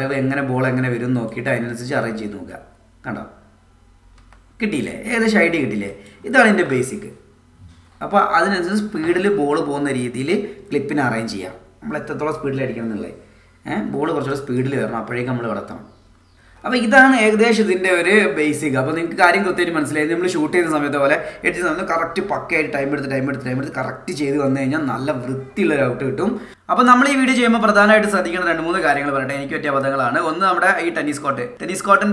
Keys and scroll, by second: 1.7 space, 4.2 space, 6.4 space, 9.4 space, 15.0 space.